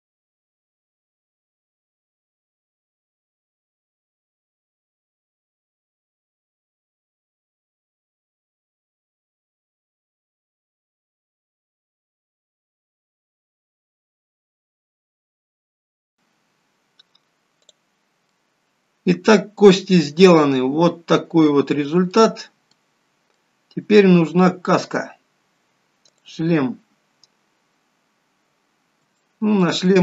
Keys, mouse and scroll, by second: 0.0 shift+click, 0.2 shift+click, 0.3 ctrl+p, 0.5 scroll down 3, 0.6 middle click, 0.8 shift+middle click, 0.9 scroll up 2, 1.1 click, 1.2 shift+click, 1.4 ctrl+p, 1.7 click, 1.8 shift+click, 2.0 ctrl+p, 2.2 middle click, 2.3 shift+middle click, 2.6 click, 2.8 click, 3.0 alt+p, 3.5 middle click, 3.7 click, 4.0 shift+click, 4.4 ctrl+p, 4.5 middle click, 5.0 middle click, 5.0 scroll down 3, 5.2 shift+middle click, 5.4 KP_1, 5.6 scroll up 1, 5.7 click, 5.8 click, 6.6 middle click, 7.4 KP_1, 7.8 shift+d, 8.1 right click, 8.4 click, 8.6 click, 9.4 middle click, 9.7 scroll up 4, 9.8 middle click, 11.0 middle click, 11.2 KP_1, 11.5-11.8 scroll down 3, 11.8 middle click, 11.8 click, 11.9 scroll up 3, 12.0 middle click, 12.9 KP_1, 13.1 scroll down 1, 13.2 shift+middle click, 13.4 click, 13.6 scroll up 4, 13.7 click, 13.9 shift+click, 14.1 ctrl+p, 15.0 click, 16.0 scroll down 4, 16.1-16.9 scroll up 1, 16.9-17.9 scroll up 1, 17.9 click, 18.5 middle click, 20.7-21.3 scroll up 2, 21.3 middle click, 22.6-23.0 scroll down 2, 23.0 middle click, 28.0 click, 29.4 shift+middle click.